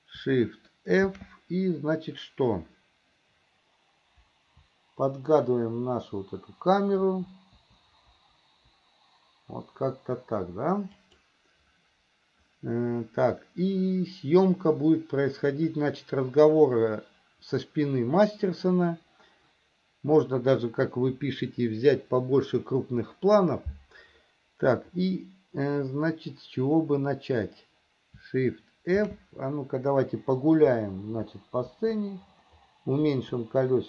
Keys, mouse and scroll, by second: 1.3 shift+f, 29.2 shift+f.